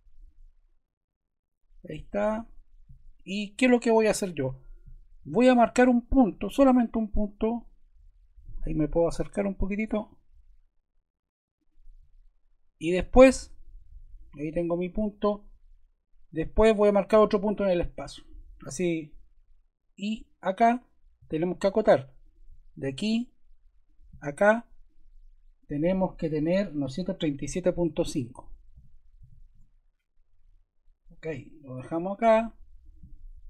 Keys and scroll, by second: 21.2 d, 27.6-29.7 typing.